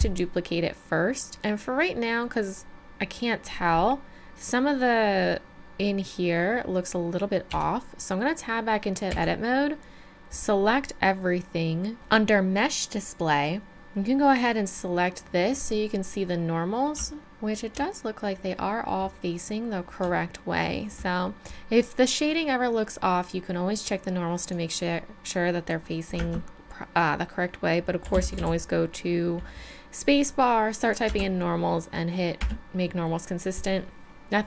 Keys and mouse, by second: 0.6 middle click, 1.1 middle click, 1.3 middle click, 7.5 Tab, 9.1 a, 12.9-16.6 middle drag, 16.6 middle click, 18.0-20.5 middle drag, 20.6 middle click, 24.4-26.2 drag, 26.2 space.